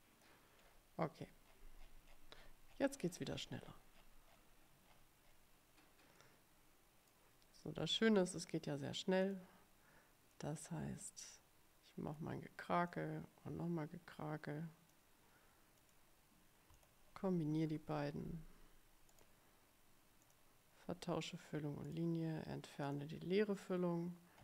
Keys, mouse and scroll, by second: 0.0 click, 0.7 scroll down 2, 1.6-5.6 scroll down 22, 6.3-7.4 middle drag, 9.4 click, 10.5-12.5 drag, 13.0-15.2 drag, 15.9 click, 16.9 shift+click, 17.8 ctrl+k, 19.2 right click, 20.3 click, 22.0 right click, 22.9 click.